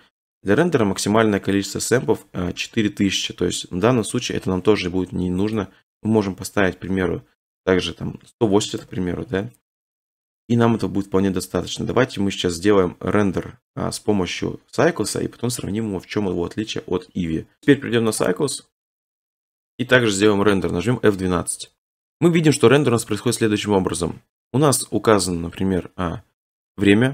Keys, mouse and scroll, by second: 5.5 click, 6.9 typing, 8.0-8.7 typing, 8.8 Return, 17.6-20.3 drag, 21.8 middle click, 22.6-22.9 scroll.